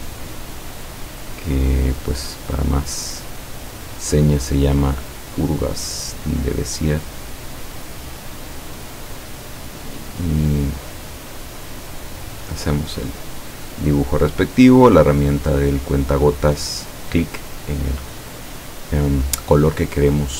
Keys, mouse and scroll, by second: 2.6 click, 5.4 click, 9.0 click, 10.5 click, 11.6 click, 12.4 click, 14.7 click, 17.0 click, 20.2 click.